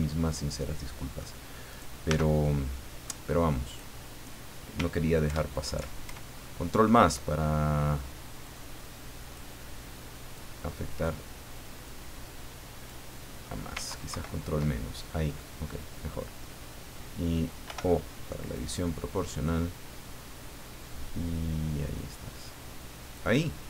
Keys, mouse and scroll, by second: 0.0-1.4 shift+middle drag, 1.7 right click, 2.1 Tab, 2.4 middle click, 3.6 right click, 5.2 ctrl+KP_Add, 8.4 click, 10.3 click, 11.8 click, 13.1 middle click, 14.1 ctrl+KP_Subtract, 15.4 middle click, 17.6 o, 18.5-23.3 drag, 23.4 middle click.